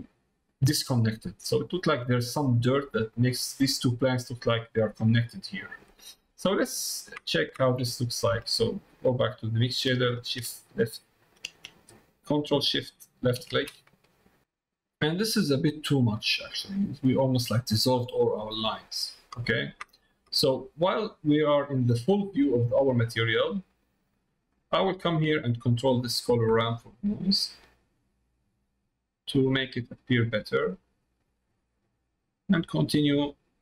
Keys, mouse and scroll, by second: 0.8 middle click, 1.6 middle click, 2.8 middle click, 6.2 middle click, 6.8 middle click, 7.2 middle click, 7.6 middle click, 13.0 ctrl+shift+click, 15.8 middle click, 17.2 middle click, 17.8 middle click, 19.4 middle click, 20.0 middle click, 21.2 middle click, 21.7 middle click, 23.0 click, 23.8 middle click, 24.2 middle click, 24.6 middle click, 25.8 middle click, 26.7-29.4 drag, 30.6-32.1 drag, 32.9-33.6 drag.